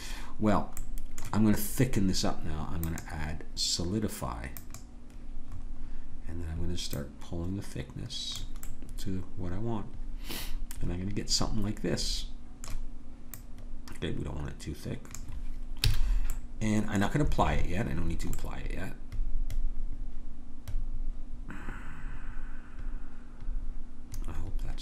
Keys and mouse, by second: 0.8-2.8 middle drag, 2.8-4.7 drag, 7.0-8.6 drag, 8.6-10.5 middle drag, 13.3-15.5 drag, 15.9 a, 16.3-18.6 drag.